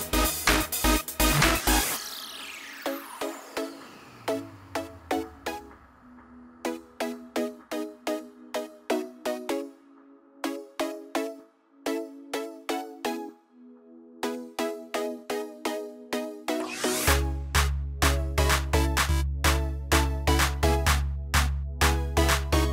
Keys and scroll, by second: 2.2 ctrl+z, 8.9 ctrl+g, 16.6 ctrl+d.